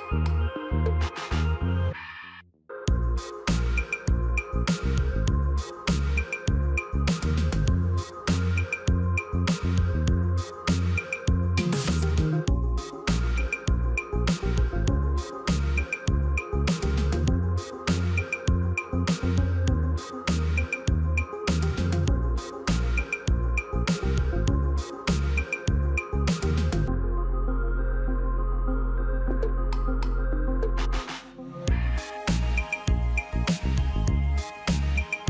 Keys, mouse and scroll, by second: 3.5 scroll up 1, 3.6 scroll down 2, 29.0 ctrl+click.